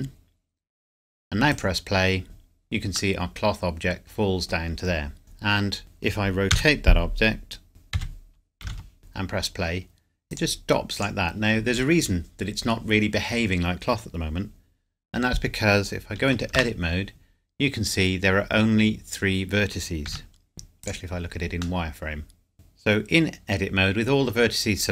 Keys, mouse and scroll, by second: 3.2 middle click, 5.2 click, 6.5 r, 7.9 x, 8.6 KP_9, 8.8 KP_0, 9.0 click, 16.5 Tab, 17.5-19.4 scroll up 1, 19.4-19.7 scroll, 20.1 z, 20.8 click, 21.8 middle click, 22.5 click.